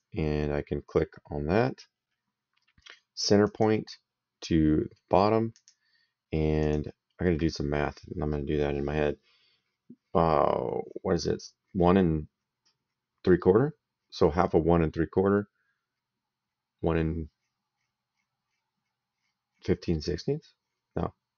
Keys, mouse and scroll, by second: 3.3 click, 5.4 click, 6.5 click.